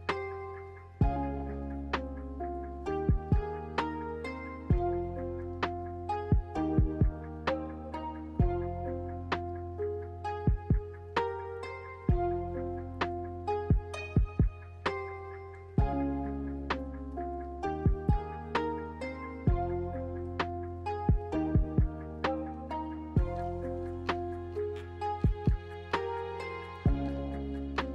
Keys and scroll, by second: 3.9 Escape, 9.2 b, 10.6 m, 13.1 Escape, 16.2 a, 18.2 shift+a, 20.6 ctrl+h, 26.7-27.7 typing.